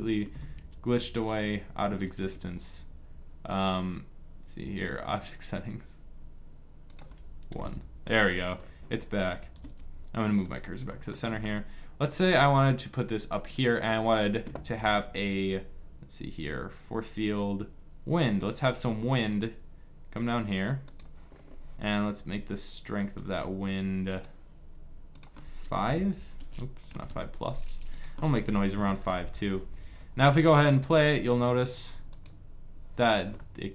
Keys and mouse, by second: 4.8-6.6 drag, 8.3 click, 9.2-10.2 middle drag, 9.2 shift+s, 12.0-13.2 drag, 13.6 click, 14.5 shift+a, 19.0 click, 21.0-27.6 drag, 32.8-33.7 drag.